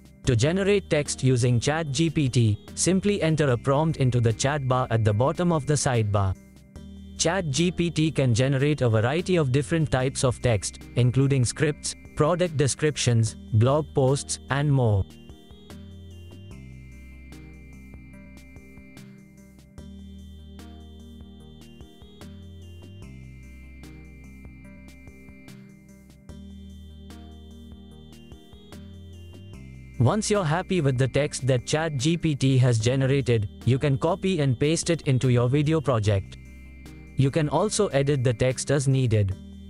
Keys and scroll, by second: 0.0-5.0 typing.